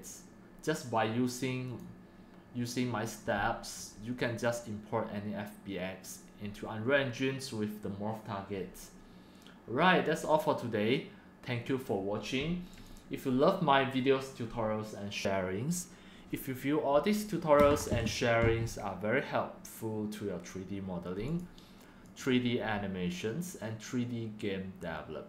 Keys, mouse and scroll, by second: 1.7 click, 1.9 click, 12.7-15.3 drag, 17.7 click, 17.8 click, 21.4 click, 22.4-24.3 drag, 24.3-25.2 right drag.